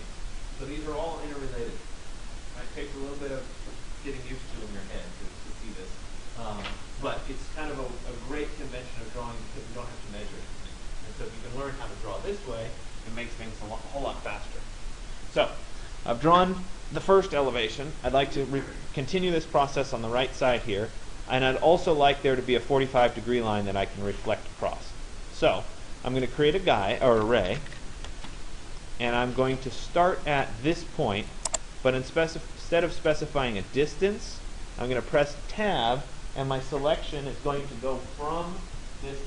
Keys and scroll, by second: 27.2 r, 28.2 Return.